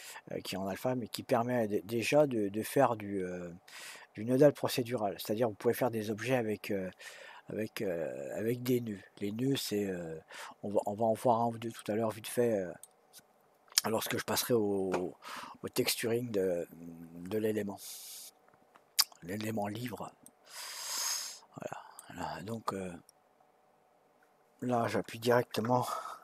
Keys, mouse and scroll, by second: 11.8-14.8 middle drag, 18.3-18.7 scroll up 1, 18.7-20.0 scroll down 1, 20.2-23.3 middle drag.